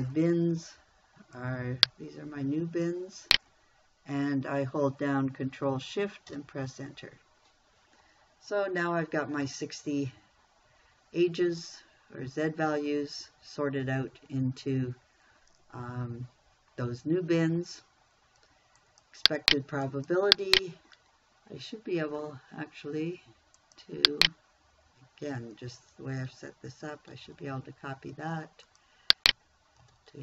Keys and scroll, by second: 6.7 ctrl+shift+Return, 27.6 ctrl+c.